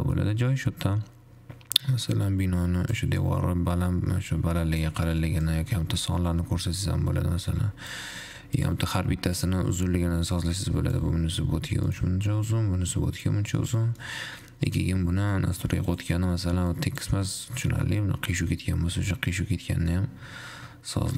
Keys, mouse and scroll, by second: 2.2-8.8 drag, 9.8-12.3 drag, 12.7-13.8 drag, 13.8-14.8 shift+middle drag, 14.8-15.7 scroll up 1, 15.7-16.3 middle drag, 16.3-17.3 drag, 18.3 middle click.